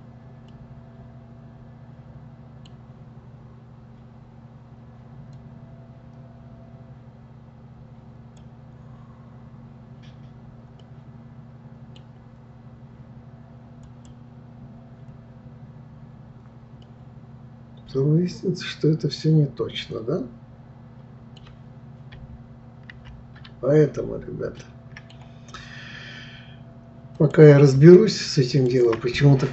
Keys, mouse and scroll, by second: 0.5-3.5 middle drag, 5.3-8.4 drag, 10.8-13.9 middle drag, 13.9-16.4 drag, 16.8-19.9 middle drag, 22.9 ctrl+z, 24.6-27.2 middle drag, 27.2 click, 28.5 shift+click.